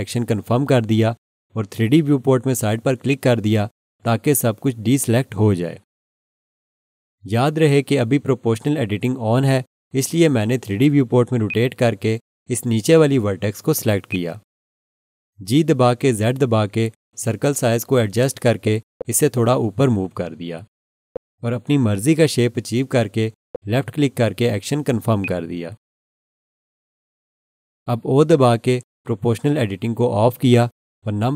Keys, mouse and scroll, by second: 3.1 click, 11.5 alt+click, 14.1 click, 16.3 g, 17.3 z, 18.5-18.8 scroll down 1, 25.2 scroll up 1, 25.2 click, 30.1 o.